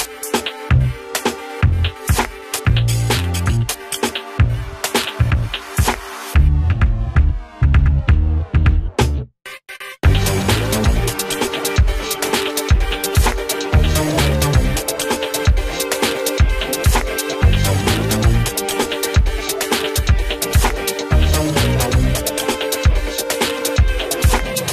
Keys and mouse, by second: 4.2 right click, 4.9-8.0 drag, 9.2 right click, 10.0-13.2 drag, 13.8 Up, 15.4 click, 16.2 Up, 17.0 click, 17.2 Up, 19.2-21.4 drag, 21.4 space, 21.8 click, 22.4 ctrl+z, 23.5 click.